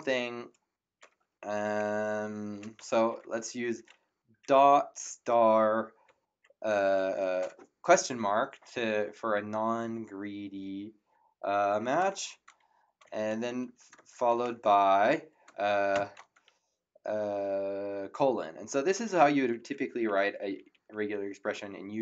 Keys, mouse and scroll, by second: 2.5 BackSpace, 2.8 shift+., 5.0 shift+8, 6.6 shift+/, 13.3 shift+l, 13.9 shift+BackSpace, 15.9 shift+;, 19.5 Right, 19.8 Left, 21.7 Right.